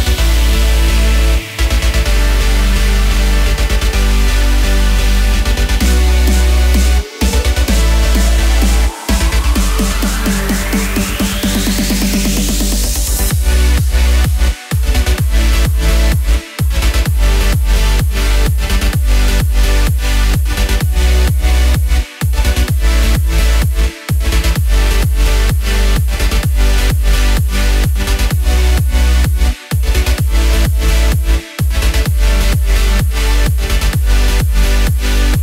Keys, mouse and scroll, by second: 0.8 click, 1.1 click, 1.4 click, 2.0 click, 2.3 click, 2.6 shift+a, 3.3 middle click, 3.8 shift+middle click, 4.1 scroll up 5, 4.3 shift+middle click, 4.6-5.6 scroll up 10, 4.8 shift+middle click, 6.0 s, 6.5-7.2 scroll up 2, 7.2 Tab, 7.4 ctrl+z, 7.4 click, 7.7 g, 8.8 click, 9.0 click, 9.5 e, 9.9 middle click, 10.1 shift+middle click, 10.3-10.9 scroll down 33, 10.9-11.4 scroll up 12, 11.0 shift+middle click, 11.4 shift+middle click, 11.8-12.2 scroll up 4, 12.6 Tab, 12.8 click, 12.9 right click, 13.6 shift+d, 14.1 click, 14.5 click, 15.1 click, 15.2 Tab, 15.4 click, 15.8 e, 16.1 middle click, 16.4 click, 17.0 e, 17.4 Tab, 17.9 shift+a, 18.7 s, 19.3 click, 19.7 Tab, 20.2 f, 20.6 e, 21.0 Tab, 21.6 shift+d, 21.9 click, 23.1 click, 23.2 shift+click, 23.4 shift+click, 23.5 shift+click, 23.8 m, 27.8 click, 28.2 click, 28.5 click, 28.8 shift+middle click, 29.0 click, 29.3 click, 30.2 click, 31.6 click, 31.9 click, 32.2 click, 33.4 click, 33.9 click, 34.3 click.